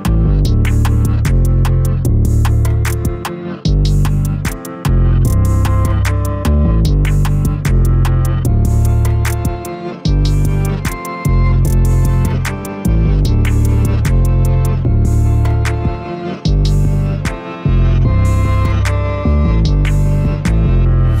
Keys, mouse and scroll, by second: 7.9 a, 8.1 a, 8.8-10.5 middle drag, 10.5 Tab, 11.4-11.9 scroll up 1, 11.9-12.5 shift+middle drag, 12.5 click, 14.3 ctrl+3, 15.3-17.7 right drag, 17.7 click, 19.3 Tab, 20.2 middle click, 20.7-21.2 scroll up 2.